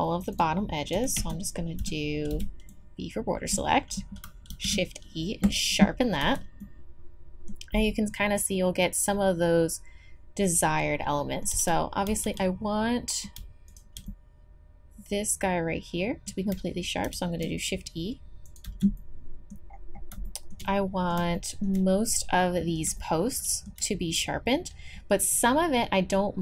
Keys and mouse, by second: 0.3 click, 0.9 a, 1.2 z, 1.8 a, 2.3 b, 4.5 shift+e, 6.2 z, 6.6-9.4 middle drag, 10.4 middle click, 11.5 z, 13.0-16.0 drag, 17.0 shift+e, 18.6 z, 19.0 click, 25.8-26.4 middle drag.